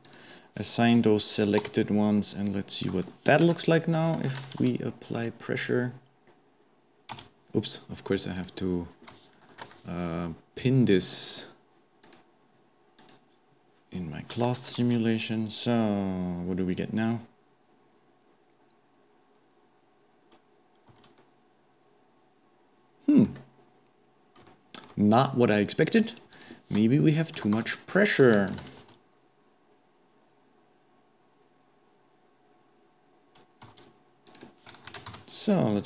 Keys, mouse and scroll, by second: 0.1 click, 1.9 Tab, 2.2-3.5 scroll down 1, 3.5 shift+Left, 4.4 shift+Left, 4.6 space, 7.5 space, 8.4 click, 9.6 shift+Left, 11.3-14.7 drag, 14.7 shift+Left, 14.8 space, 20.9 space, 21.2-23.3 middle drag, 23.3 scroll down 1, 23.5-24.5 scroll up 2, 24.5-26.3 shift+middle drag, 26.3-28.6 drag, 28.6 shift+Left, 28.8 space, 33.9 space, 34.3-35.8 drag.